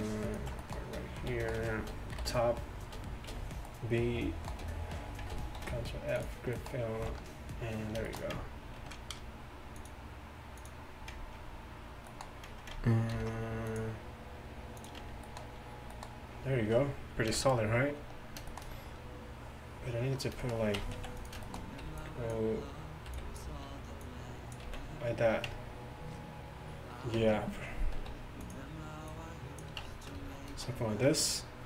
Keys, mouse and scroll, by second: 0.3 middle click, 1.2 z, 2.2 KP_7, 3.4 b, 5.7 ctrl+f, 7.0 z, 9.0 ctrl+r, 13.2 ctrl+r, 15.1 Tab, 17.4 KP_1, 20.8 Tab, 21.0 z, 21.2 click, 21.9 b, 23.2 b, 24.1 click, 25.5 Tab, 25.5 b, 25.5 z, 27.2 Tab, 28.0 s, 29.9 Tab.